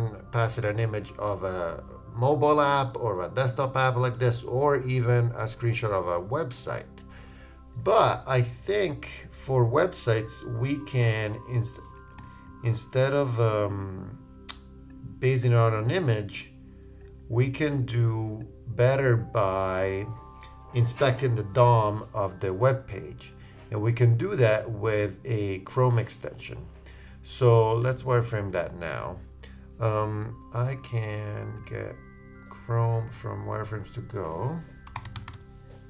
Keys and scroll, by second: 12.2 super+z.